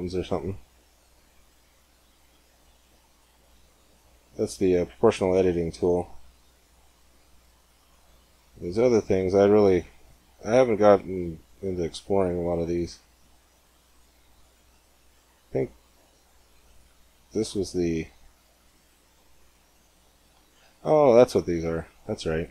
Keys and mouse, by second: 1.1-3.0 drag, 3.8-5.8 middle drag, 14.1-15.9 drag, 16.3-22.5 drag.